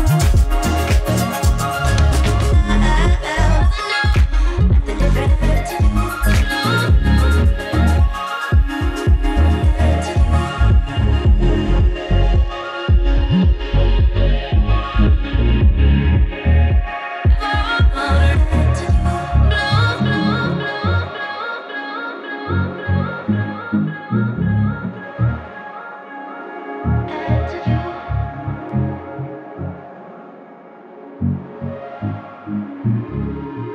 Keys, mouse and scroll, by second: 7.5-26.5 drag, 26.5-29.1 drag.